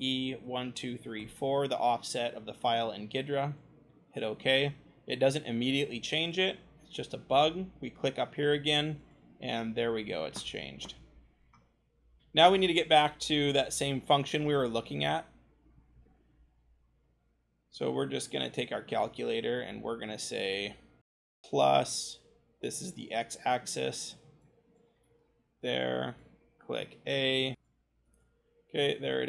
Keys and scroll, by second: 0.4 0, 11.4-13.1 scroll, 17.3 c, 24.9 v, 26.8 a, 27.5 scroll, 27.5 v, 27.5 BackSpace.